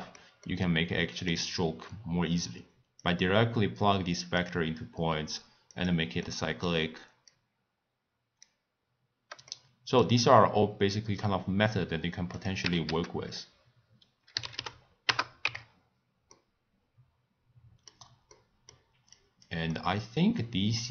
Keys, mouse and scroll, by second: 3.0 click, 5.7 click, 6.2-7.3 middle drag, 7.3 drag, 9.5-12.3 middle drag, 12.3-15.4 drag, 16.3-19.1 middle drag, 19.1 click, 19.7-20.9 middle drag.